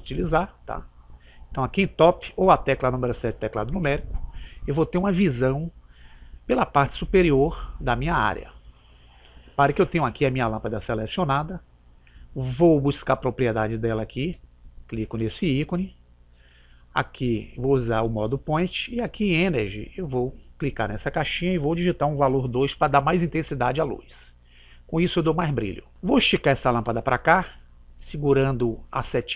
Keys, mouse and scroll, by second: 14.5 click, 20.2 click, 28.1 click.